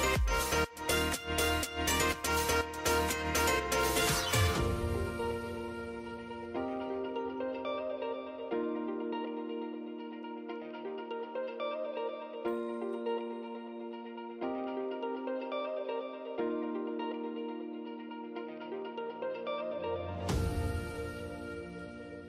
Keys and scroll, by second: 18.9 ctrl+j.